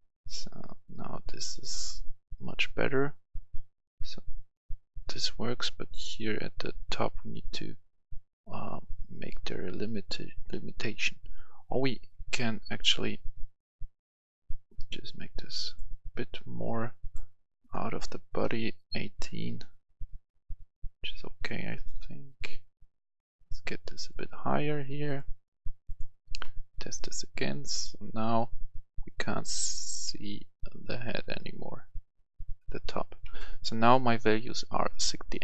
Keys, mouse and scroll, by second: 11.5 Escape, 12.5-12.8 scroll up 1, 13.8-15.5 drag, 19.6 click, 21.5 Escape, 22.8-27.5 drag, 33.3 Escape.